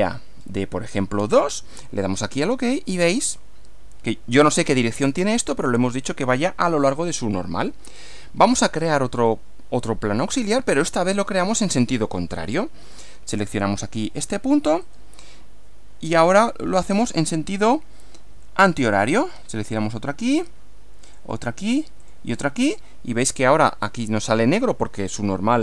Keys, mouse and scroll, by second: 0.1 click, 0.4 scroll up 1, 2.2 click, 8.5 click, 9.2 click, 11.4 click, 14.8 click, 18.9 click, 21.1 click, 22.0 click, 22.7 click, 25.1-25.6 middle drag.